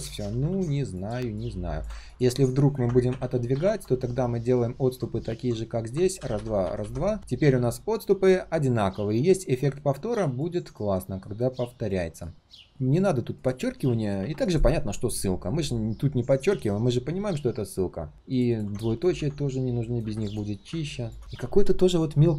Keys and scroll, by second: 0.0 ctrl+z, 0.1 ctrl+z, 0.3 ctrl+z, 14.1 ctrl+u.